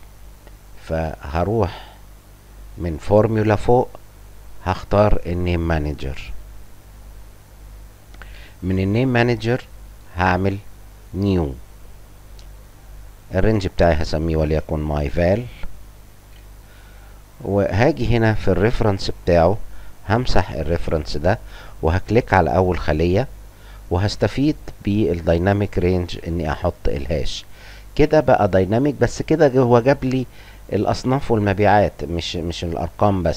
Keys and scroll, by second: 14.4-16.8 typing, 25.1-28.2 typing.